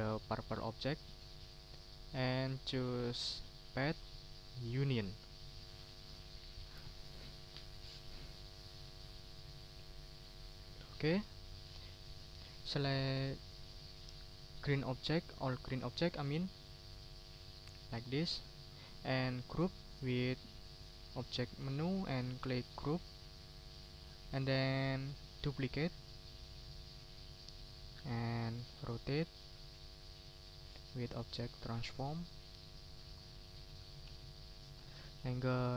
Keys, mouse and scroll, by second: 0.5 shift+click, 1.0 shift+click, 2.6 ctrl+z, 3.7 click, 4.7 click, 5.2 middle click, 11.4-12.8 middle drag, 13.1 middle click, 14.7 shift+click, 16.6 click, 17.2-18.5 ctrl+drag, 18.8 ctrl+z, 20.5 click, 21.2 click, 22.7 click, 23.2 ctrl+middle click, 23.6 ctrl+scroll down 2, 25.3 right click, 26.4 click, 29.3 click, 31.5 click, 33.6-34.9 drag.